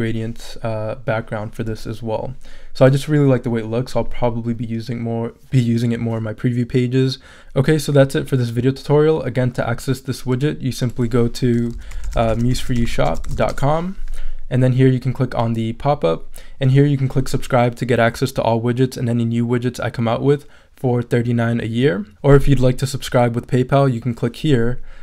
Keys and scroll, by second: 11.5-13.8 typing.